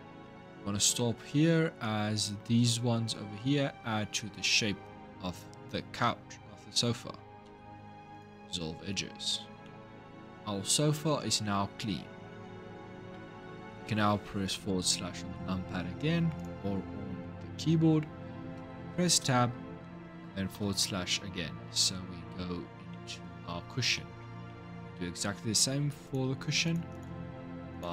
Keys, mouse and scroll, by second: 0.4-0.7 scroll up 1, 0.7-4.6 middle drag, 7.2 x, 8.6-9.4 scroll down 3, 9.4-12.5 middle drag, 12.9 Tab, 14.5 KP_Divide, 16.2 click, 18.3 Tab, 20.3 KP_Divide, 22.0-22.7 scroll up 3, 22.7 middle click, 23.5 scroll up 2, 23.7-25.8 middle drag, 25.8 click, 26.4 alt+shift+click, 26.7 alt+shift+click, 27.5 alt+shift+click.